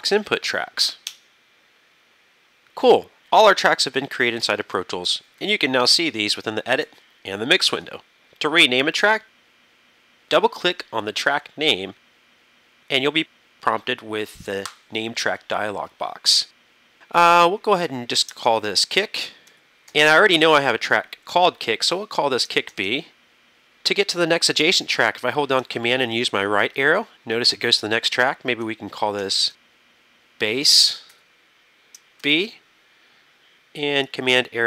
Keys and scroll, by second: 1.1 KP_Enter, 5.5 super+=, 6.9 super+=, 18.4 shift+k, 18.7 i, 19.6 c, 19.9 k, 21.4 -, 22.7 shift+b, 26.2 super+Right, 29.1-31.2 typing, 32.2 shift+b, 34.4 super+Right.